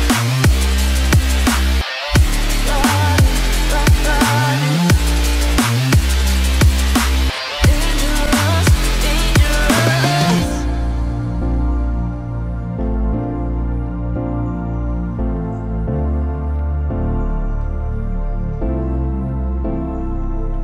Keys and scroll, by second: 14.1 ctrl+0.